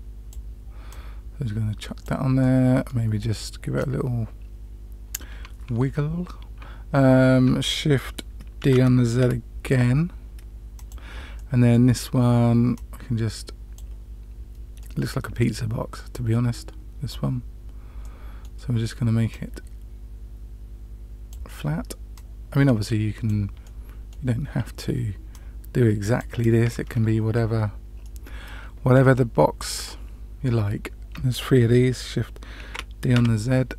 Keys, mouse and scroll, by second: 0.8-2.0 drag, 2.3-2.9 middle drag, 3.7-5.4 drag, 8.6 shift+d, 11.3-11.8 middle drag, 12.7-13.8 drag, 14.7 middle click, 16.0-17.2 drag, 17.9-18.4 middle drag, 19.2-21.2 drag, 22.1-23.2 drag, 23.6-24.1 middle drag, 25.2-26.6 drag, 26.8-28.0 scroll up 2, 28.0-29.8 middle drag, 32.6 shift+d.